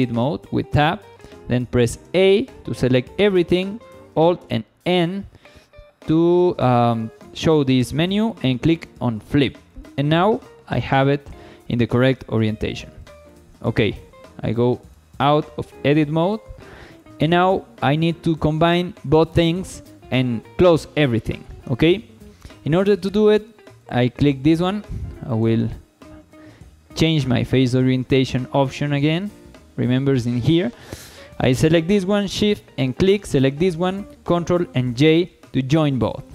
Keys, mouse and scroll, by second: 2.1 a, 4.4 alt+n, 9.7 shift+middle click, 10.0-11.1 middle drag, 11.4 scroll down 1, 11.6 shift+middle click, 12.1 1, 12.7 scroll up 1, 13.0 shift+middle click, 14.9 Tab, 16.7 shift+middle drag, 21.3 shift+middle drag, 21.7-22.6 middle drag, 22.7 shift+middle drag, 23.8 click, 25.2-27.5 drag, 28.2 shift+middle click, 32.8 shift+click, 34.9 ctrl+j.